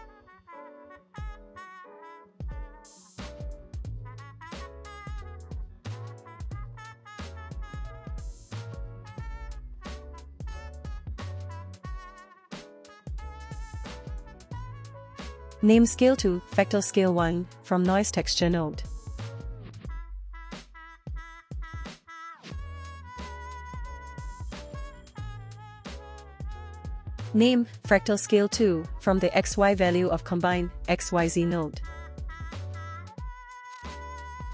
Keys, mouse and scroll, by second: 1.1 middle click, 1.5 click, 1.7 shift+d, 2.2 drag, 4.5 middle click, 4.8 scroll down 2, 5.0 middle click, 5.6 click, 6.6 click, 7.9-22.2 drag, 22.7 click, 22.9 shift+d, 23.3 click, 23.8 click, 24.1 Delete, 24.5 drag, 24.9 shift+click, 24.9 shift+right click, 25.1 click, 26.5-28.7 drag, 30.6 middle click, 31.1 middle click, 32.0-32.7 scroll up 2, 32.7 drag, 33.5 drag.